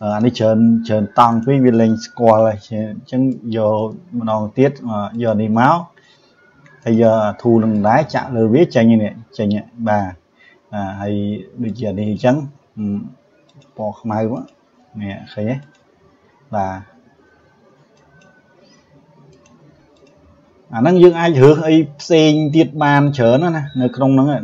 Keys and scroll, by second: 2.3 Delete.